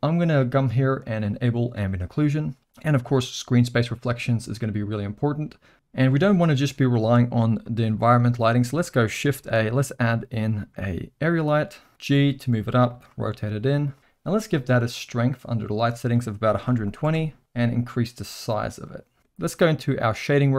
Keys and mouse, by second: 1.9 click, 3.8 click, 4.6 click, 7.6 middle drag, 9.4 shift+a, 12.9 g, 13.1 r, 16.0-17.4 drag, 17.8-19.2 drag, 19.2 middle click, 20.0 click.